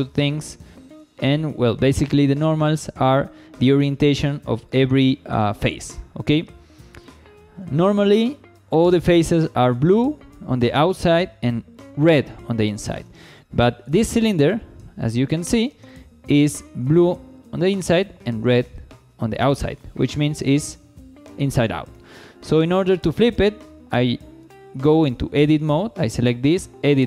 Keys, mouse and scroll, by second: 4.7 shift+scroll up 1, 5.2 scroll up 1, 5.5 shift+middle click, 5.9-7.3 middle drag, 7.3 scroll up 1, 7.7 shift+middle click, 12.3 scroll down 1, 12.7 shift+middle click, 13.9 3, 14.1 click, 15.5 shift+middle click, 15.9 middle click, 17.6 shift+middle click, 18.6 middle click, 19.5-20.0 scroll down 1, 20.2 shift+middle click, 21.4 scroll down 1, 21.7 shift+middle click, 22.5 middle click, 24.4 Tab, 25.9 click, 26.6 Tab.